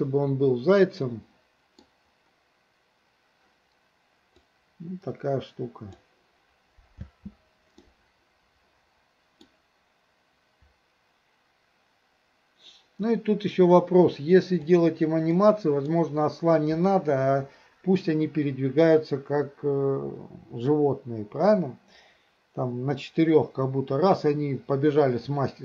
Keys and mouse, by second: 4.5-6.0 drag, 7.0 space, 7.9-9.5 middle drag, 14.7 click, 15.4-15.9 middle drag.